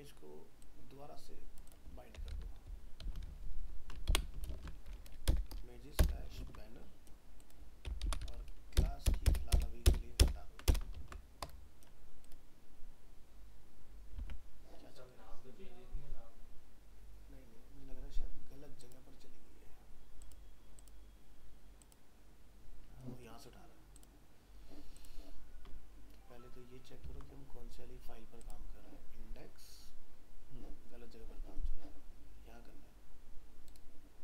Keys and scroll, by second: 3.3 ctrl+shift+Right, 4.5 ctrl+space, 6.4 ctrl+s, 8.8 ctrl+BackSpace, 10.9 ctrl+s, 14.2 alt+Tab, 27.0 ctrl+w.